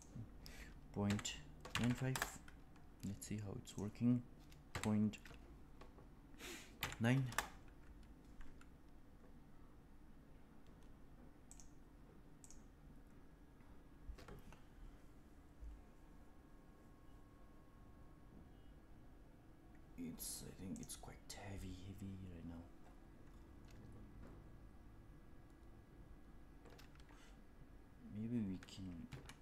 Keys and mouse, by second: 3.6-8.1 drag, 11.4 click, 12.4-13.8 drag.